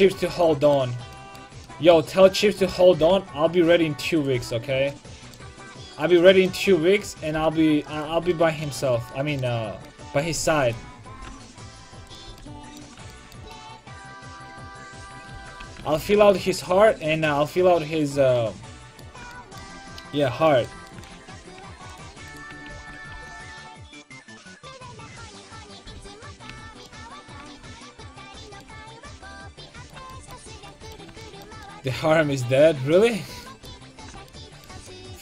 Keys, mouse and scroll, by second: 0.2-1.9 drag, 0.3 a, 2.5 click, 3.0 g, 4.4-6.2 drag, 4.4 a, 7.0-8.1 right drag, 7.4 g, 8.1 a, 8.5 middle click, 9.0 click, 10.7 click, 11.2 g, 11.5 right click, 12.3 a, 14.9 right click, 15.4 ctrl+x, 15.6 a, 16.0 ctrl+t, 16.1 a, 21.4 ctrl+Tab, 22.3 click, 22.8 ctrl+x, 23.3 k, 26.5 a, 27.6 ctrl+Tab, 32.9 middle click, 33.2-34.9 middle drag.